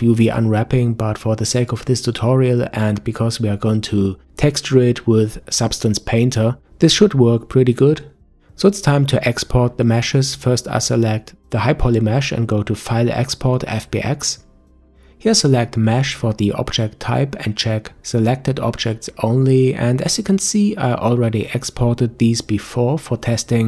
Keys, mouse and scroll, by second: 5.9 Tab, 8.3 click, 10.2 click, 12.6-15.6 drag.